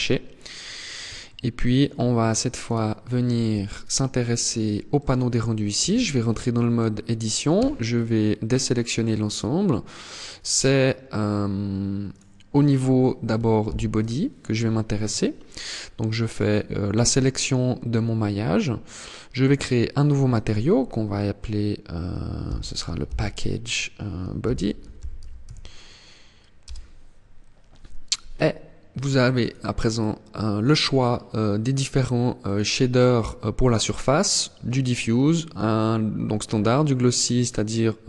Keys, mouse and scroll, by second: 0.1-0.5 scroll up 2, 0.6 scroll down 1, 0.9 shift+middle click, 1.7 scroll up 1, 2.2 right click, 4.5 click, 5.4 Tab, 7.1 a, 9.3 middle click, 11.7 right click, 13.2 ctrl+l, 18.9 click, 19.9 click, 28.9 click, 32.0 click.